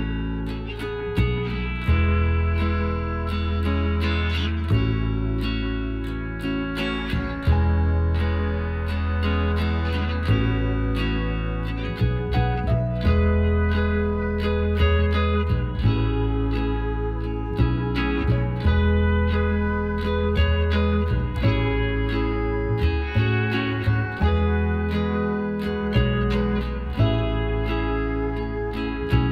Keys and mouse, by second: 0.6 a, 2.4 middle click, 4.9-7.2 right drag, 6.6 g, 8.1-9.8 middle drag, 9.8-11.5 right drag, 10.6 g, 11.8-13.8 middle drag, 12.5 a, 12.8 a, 14.8 ctrl+n, 15.8 Tab, 16.3-17.6 drag, 17.2 Tab, 17.6-19.1 middle drag, 19.8-21.5 drag, 20.7-22.1 right drag, 22.1-26.2 middle drag, 26.2-29.3 drag, 26.2 right click, 27.0-28.6 right drag.